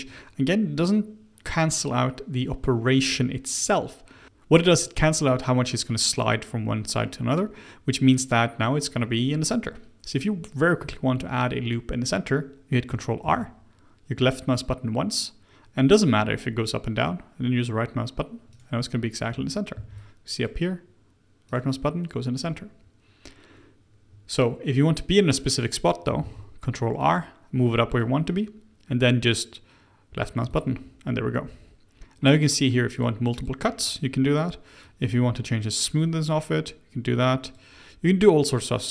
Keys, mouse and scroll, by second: 10.8-13.2 middle drag, 13.2 ctrl+r, 19.7 ctrl+r, 22.3 click, 26.1 ctrl+r, 32.9-37.8 drag, 38.3 click, 38.7 click.